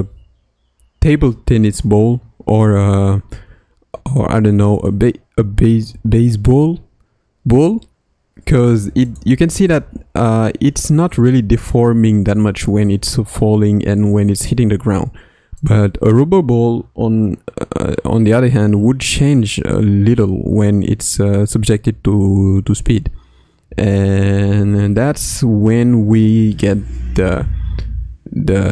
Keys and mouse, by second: 1.5 click, 2.6 space, 3.3 space, 4.8 click, 5.3 space, 5.9 space, 9.0 click, 9.6 space, 14.9 space, 15.6 click, 26.1-28.7 drag.